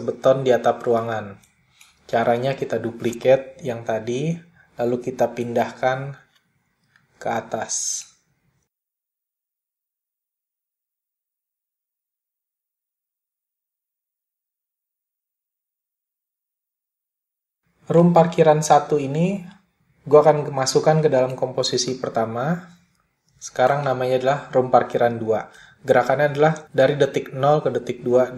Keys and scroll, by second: 1.2 super+d, 7.3 /.